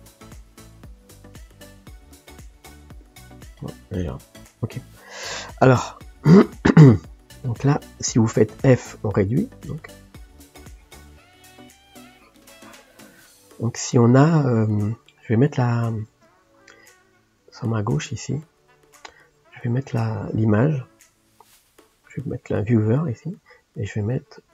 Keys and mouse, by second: 0.0 click, 3.7 click, 5.5 ctrl+click, 5.7 ctrl+space, 6.4-8.5 middle drag, 8.5 f, 9.8-13.3 drag, 13.3-16.2 middle drag, 16.2 ctrl+space.